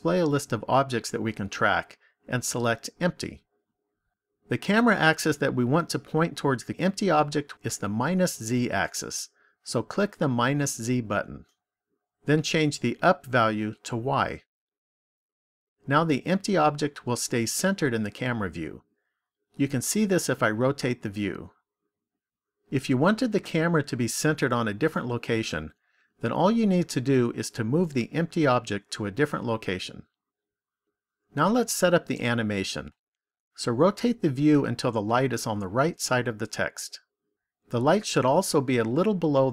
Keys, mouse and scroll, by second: 10.1 click, 13.0 click, 19.7 middle click, 33.7 middle click.